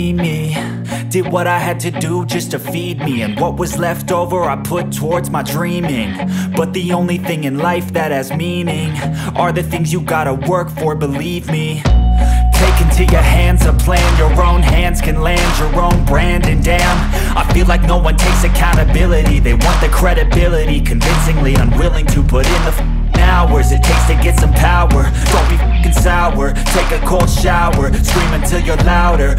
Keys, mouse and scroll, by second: 0.6 Delete, 2.2-5.0 drag, 10.1 click, 14.5-15.1 scroll up 1, 16.6-23.7 drag, 23.7 ctrl+right click, 24.4 scroll down 1, 25.8 click, 28.4 ctrl+right click.